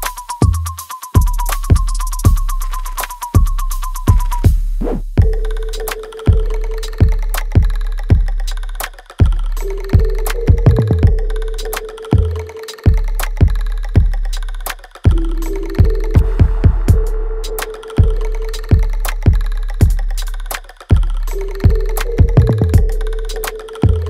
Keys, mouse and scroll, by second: 0.6-2.6 alt+middle drag, 2.6 click, 2.9 alt+right click, 4.0 click, 6.0-8.4 alt+right drag, 8.4 right click, 9.4-10.8 scroll down 1, 11.5 space, 13.0 alt+middle click, 13.9-17.7 drag, 17.7 space, 18.5-21.9 alt+right drag, 21.9 click.